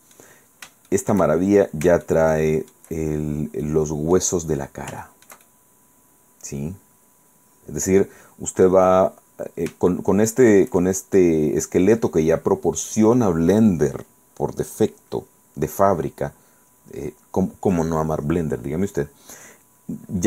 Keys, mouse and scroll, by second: 0.5 scroll down 1, 1.0 shift+middle click, 1.1 shift+click, 1.5-1.8 shift+scroll up 1, 2.2 shift+middle click, 3.3-3.8 shift+scroll down 5, 3.8 middle click, 4.6 scroll down 2, 5.1 shift+middle click, 5.2-9.0 shift+drag, 9.2-9.8 scroll up 2, 10.0 shift+middle click, 11.3-13.2 shift+middle drag.